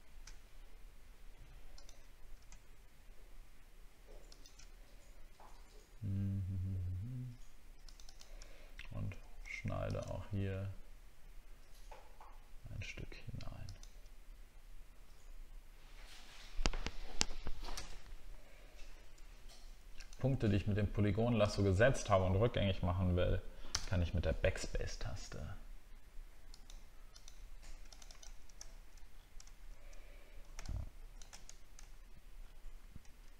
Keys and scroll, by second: 8.5 alt+scroll up 1, 29.2 alt+scroll down 1, 29.6 alt+scroll up 1, 31.9-32.3 alt+scroll down 1, 32.4 alt+scroll up 1.